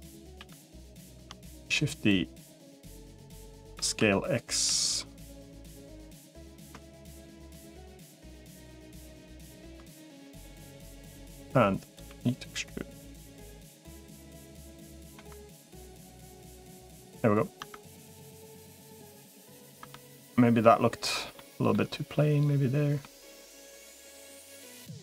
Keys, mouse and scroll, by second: 0.2 g, 1.0 shift+d, 2.0 click, 3.0 click, 3.6 s, 5.6 click, 6.2 middle click, 6.9 shift+middle click, 9.2 shift+middle click, 11.2 click, 12.0 e, 13.8 s, 15.0 Tab, 15.7-16.8 middle drag, 17.4 Tab, 19.6 Tab, 20.1 middle click, 21.2 middle click, 21.5-22.8 middle drag, 23.3-24.5 middle drag, 24.9 middle click.